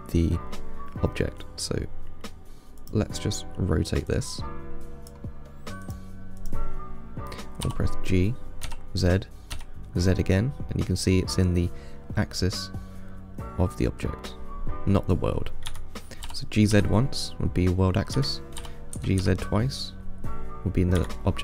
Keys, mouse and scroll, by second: 3.1-4.4 drag, 6.1 click, 6.6 click, 7.9 g, 16.5 g, 18.8 g.